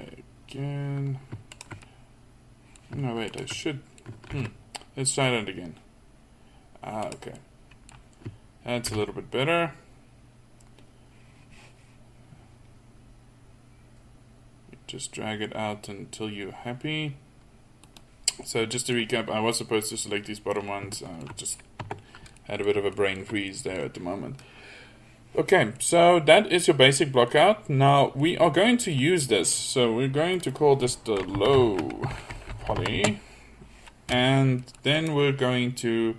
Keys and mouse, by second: 1.5-2.7 middle drag, 4.4 ctrl+b, 8.9 ctrl+b, 18.4 middle click, 21.8 Tab, 28.6-29.0 middle drag, 34.7-35.0 middle drag.